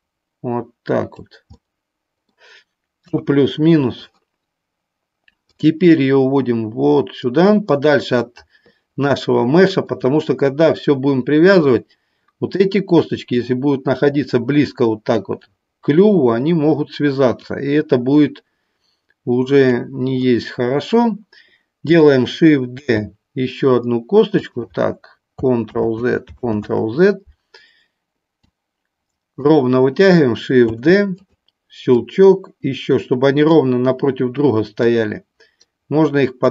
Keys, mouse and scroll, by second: 2.9 KP_3, 5.4-8.4 drag, 13.4-15.2 drag, 17.5-19.7 drag, 24.3 click, 25.7 ctrl+z, 28.6 click, 31.2 click, 31.9-33.4 drag, 34.8-36.4 drag.